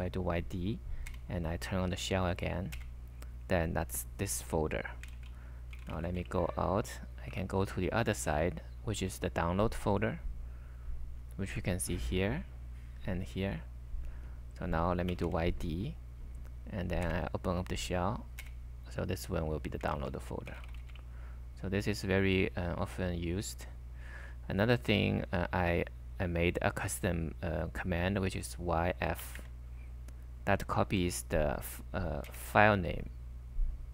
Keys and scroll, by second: 1.1 s, 2.8 super+v, 5.2 ctrl+c, 5.5-7.4 typing, 14.9-15.6 typing, 16.8-17.6 typing, 18.4 super+v, 19.1 typing, 20.0 ctrl+c, 20.3-21.3 typing, 29.0-29.8 typing, 31.0 s, 32.3 super+v.